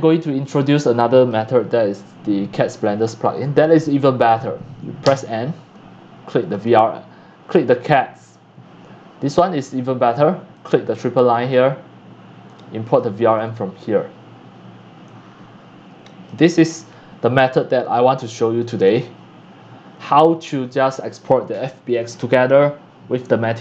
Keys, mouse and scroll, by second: 0.4 click, 0.8-5.0 drag, 5.0 n, 6.5 click, 7.5 click, 8.0 click, 10.5 click, 11.3 click, 12.4 click, 12.8 click, 15.0 click, 18.6 click, 21.5-23.6 drag.